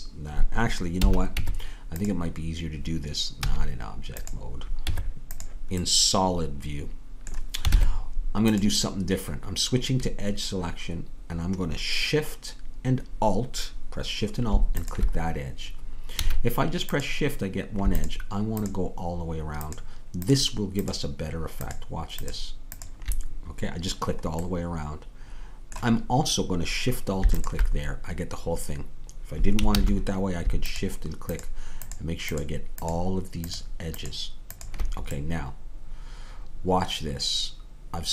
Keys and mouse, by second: 1.0 a, 1.4 Tab, 3.4 z, 4.8 Tab, 7.7 ctrl+Tab, 16.2-29.2 drag, 16.2 a, 29.7 ctrl+z, 33.3-37.2 drag.